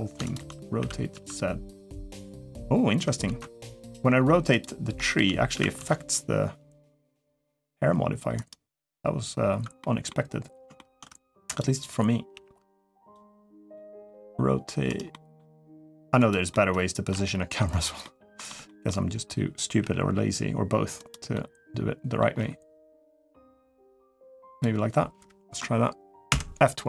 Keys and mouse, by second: 0.1 shift+click, 0.6 r, 3.1 ctrl+z, 4.4-4.7 drag, 4.8 shift+click, 5.3 r, 9.6-9.9 middle drag, 10.5 shift+middle click, 12.1 g, 13.5 middle click, 13.9 r, 14.9 middle click, 15.4 r, 16.3-17.6 middle drag, 17.0 g, 17.8-18.2 middle drag, 18.4 shift+middle drag, 21.1-22.0 middle drag, 21.1 g, 22.1 g.